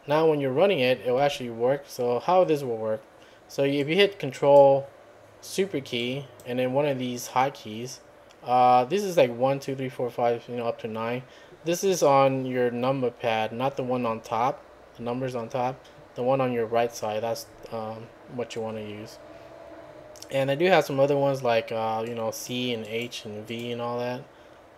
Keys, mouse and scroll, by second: 1.2 `, 3.8 click, 6.0 click, 22.1 click, 22.9 click, 23.5 click.